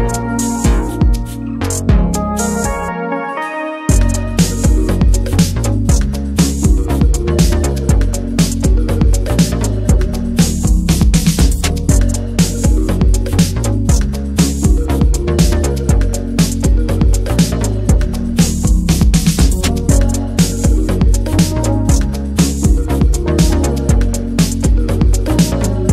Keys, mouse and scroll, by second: 0.2-2.5 alt+middle drag, 2.5 click, 3.7 Tab, 3.8-4.1 middle drag, 4.1 Tab, 4.7 scroll up 1, 4.7 2, 4.9 middle click, 5.5-6.7 alt+shift+drag, 6.7 alt+middle click, 6.9 alt+z, 7.4 click, 8.0 alt+z, 8.2 middle click, 8.6 Tab, 8.7 click, 9.0 middle drag, 9.1 Tab, 9.3-10.2 middle drag, 10.2 ctrl+z, 10.8 Tab, 11.0-11.5 middle drag, 11.5 click, 12.2 scroll down 1, 12.2-12.7 middle drag, 12.7 Tab, 12.8 middle click, 13.2 drag, 13.4-13.9 drag, 13.9 Tab, 14.3 Tab, 14.3 click, 14.6 Tab, 14.9 ctrl+r, 15.7 middle click, 16.4 scroll up 1, 16.5 alt+middle click, 17.5 alt+s, 18.9 right click, 19.4 middle click, 19.6 alt+s, 21.1 alt+middle click, 21.3 alt+middle click, 21.5 alt+z, 21.8 alt+middle click, 22.3 s, 23.4 alt+z, 23.8 middle click, 24.2 ctrl+z, 24.7 alt+z, 25.1 shift+middle click, 25.4 s.